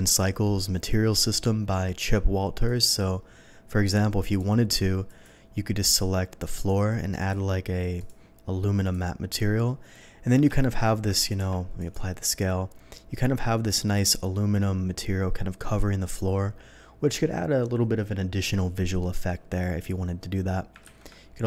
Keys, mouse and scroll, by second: 2.6 click, 4.2 click, 5.0 click, 6.4 click, 7.1 click, 7.9 click, 8.8 click, 10.5 shift+middle drag, 11.1 ctrl+a, 11.7 click.